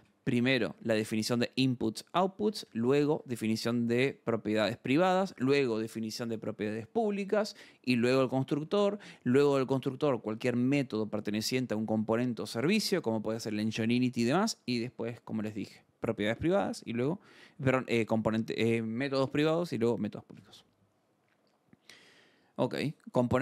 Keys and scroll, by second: 0.0-0.9 typing, 1.2 Escape, 2.2-3.1 typing, 3.1 Escape, 7.6-8.7 typing, 8.7 Escape, 15.0 alt+Tab, 21.4 scroll.